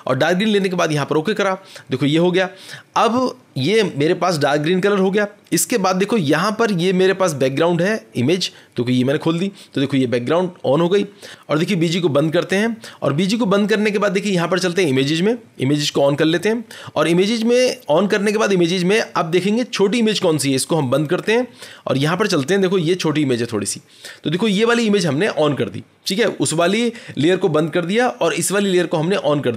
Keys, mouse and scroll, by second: 0.5 click, 5.9-7.4 scroll, 7.4-8.3 scroll, 8.9 click, 12.3 click, 15.9 click, 16.5-16.9 scroll, 16.9-17.3 scroll down 6, 17.3-17.9 scroll, 17.9 scroll, 20.7 scroll down 10, 20.8 click, 20.9 scroll, 22.1 click, 22.1 scroll.